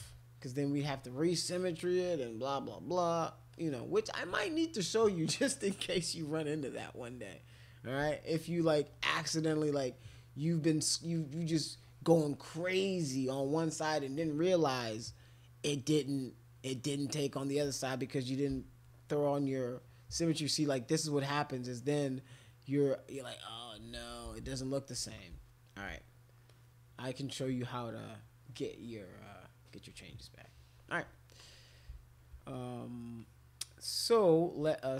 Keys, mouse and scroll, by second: 0.0 alt+click, 3.5 click, 8.8 scroll down 2, 8.9-11.1 scroll up 2, 11.1-13.5 drag, 18.5 x, 19.2-21.9 drag, 21.9 click, 22.2 click, 22.7 click, 24.0 ctrl+z, 24.2 ctrl+z, 24.4 ctrl+z, 25.0 click, 26.5 alt+click, 31.4 click, 32.5 alt+click, 33.2 alt+click, 33.8 alt+click, 34.6 click.